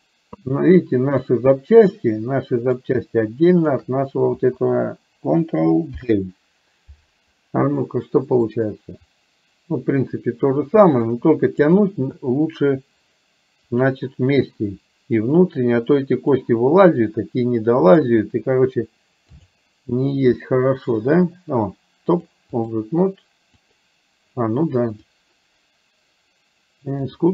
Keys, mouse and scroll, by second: 0.6 middle click, 2.1 middle click, 3.6 shift+click, 5.9 ctrl+g, 8.6-11.7 drag, 13.8 click, 15.6 click, 17.8-19.7 drag, 22.2 click, 25.2-27.3 drag.